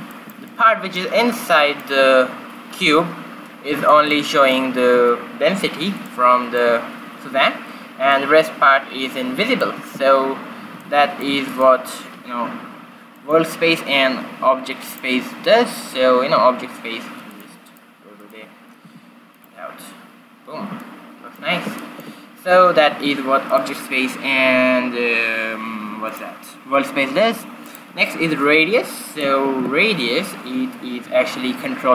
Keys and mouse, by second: 3.2 middle click, 6.1 middle click, 6.3-8.0 middle drag, 8.2 middle click, 9.7 middle click, 10.0 q, 11.0 middle click, 11.7-13.6 right drag, 13.2-15.1 drag, 17.4-19.0 drag, 19.0-20.2 right drag, 19.0 g, 20.9-22.3 middle drag, 23.1 shift+z, 23.6-25.6 right drag, 26.2-29.9 drag, 29.9 shift+z.